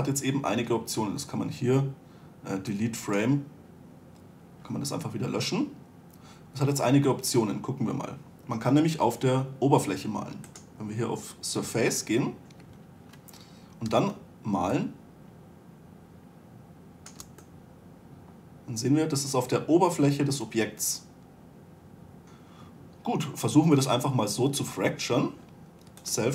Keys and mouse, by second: 14.3-15.1 d, 17.5 d, 23.3-24.2 middle drag.